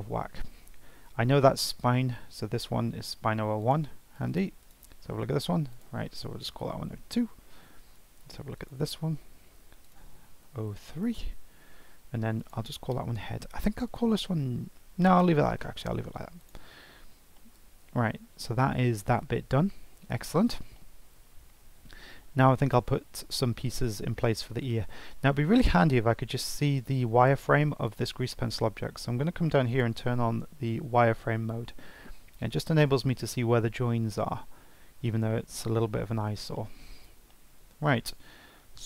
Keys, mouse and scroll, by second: 1.5 click, 2.2 F2, 4.6 click, 4.9 F2, 8.5 click, 9.3 F2, 12.4 click, 13.8 click, 16.4 click, 16.8-17.1 scroll down 2, 17.1 scroll up 2, 17.4 shift+middle click, 17.9 scroll down 2, 18.1-18.5 scroll up 3, 19.9-20.2 scroll down 2, 20.2-20.7 scroll up 2, 20.7 shift+middle click, 21.4 scroll down 1, 21.7-24.7 scroll up 1, 27.8-30.8 drag, 32.3-34.6 scroll up 2, 34.6-34.9 scroll down 3, 34.9-35.3 scroll up 3, 35.3-36.9 shift+middle drag, 36.9 scroll up 3, 37.3-38.8 shift+middle drag.